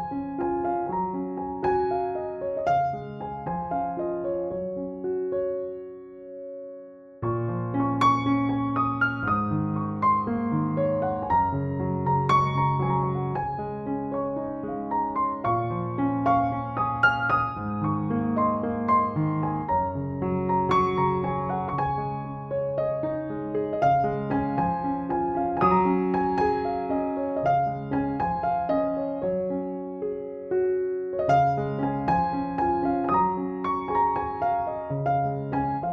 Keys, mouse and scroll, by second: 12.5 space, 12.8 b, 13.4 ], 13.7 ], 14.2-24.2 drag, 24.5-27.6 typing, 25.3 drag, 26.5-27.0 click, 27.7 click, 28.6 ctrl+-, 29.0 ctrl+=, 34.2-35.9 drag.